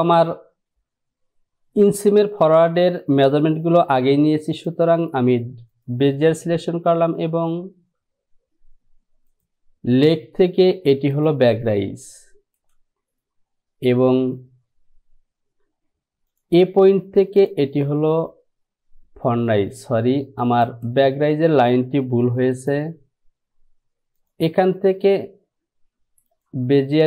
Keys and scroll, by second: 22.5 Delete.